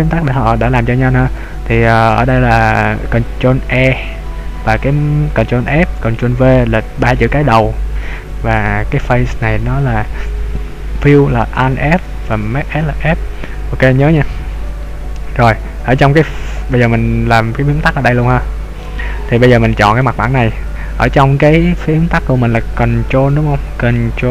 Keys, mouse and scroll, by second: 0.2 click, 17.5-18.2 scroll down 4, 18.2 middle click, 19.2-19.5 scroll up 2, 20.0 right click.